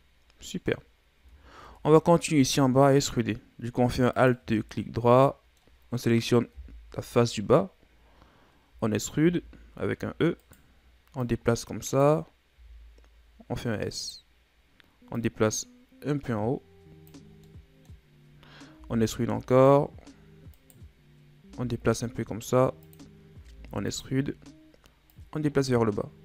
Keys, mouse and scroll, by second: 1.2 Tab, 1.7 Tab, 4.2 alt+right click, 4.6 scroll down 4, 4.8-6.6 middle drag, 6.6 KP_1, 7.9 scroll up 2, 8.7 z, 9.2 z, 9.9 e, 11.2-12.6 drag, 12.6 s, 15.2-17.3 drag, 17.3 scroll down 1, 17.5 middle click, 18.1-18.8 scroll up 1, 18.8 e, 21.4 s, 23.4 e, 25.1-26.2 drag.